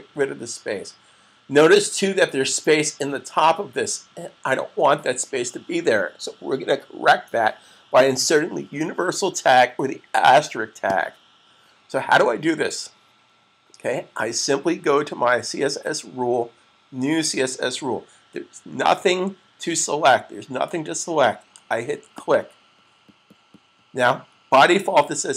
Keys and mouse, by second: 21.9 click.